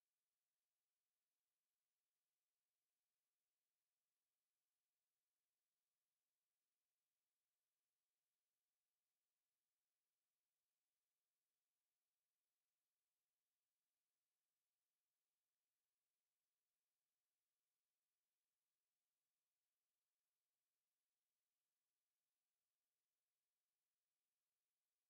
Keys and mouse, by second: 4.7 alt+click, 5.7 alt+click, 6.5 click, 7.4 alt+click, 8.3 r, 16.9 r, 17.1 alt+click, 17.8 alt+right click, 18.4 alt+click, 19.2 alt+right click, 20.3 click, 22.5 alt+click, 23.8 w, 24.6 click.